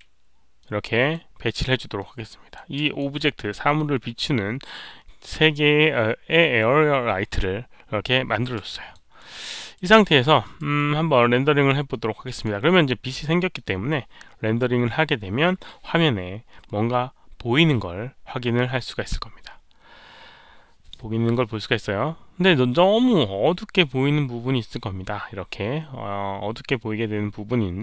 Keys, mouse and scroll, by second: 0.0-0.5 typing, 0.5 ctrl+d, 0.5-1.1 drag, 0.5 alt+middle click, 1.9-2.5 drag, 2.8 alt+click, 4.7-5.3 middle drag, 8.7 alt+click, 9.1 alt+middle click, 9.4-9.7 alt+right drag, 10.0 alt+middle drag, 10.4 alt+right drag, 10.7-11.1 alt+middle drag, 11.8-12.4 drag, 13.5 click, 13.6 alt+middle click, 13.6 alt+right click.